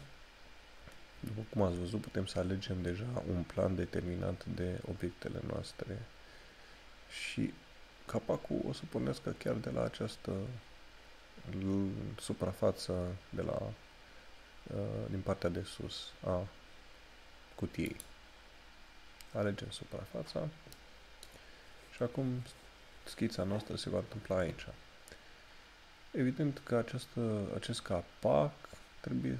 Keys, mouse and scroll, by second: 0.9 scroll up 1, 18.0 click, 19.8 scroll down 1.